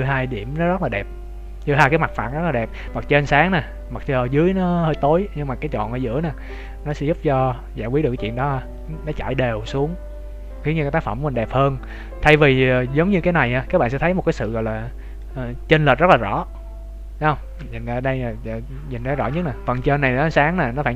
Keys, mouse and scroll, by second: 11.8 right click, 12.3 middle click, 18.0 shift+middle click.